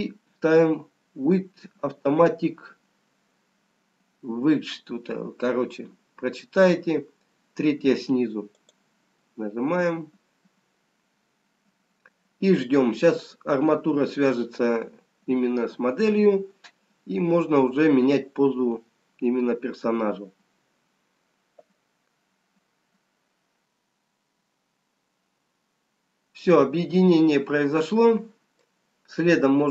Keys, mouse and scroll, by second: 0.7 ctrl+p, 24.7-25.1 scroll up 1, 25.9 scroll down 3, 27.2 middle click, 27.2 scroll up 1.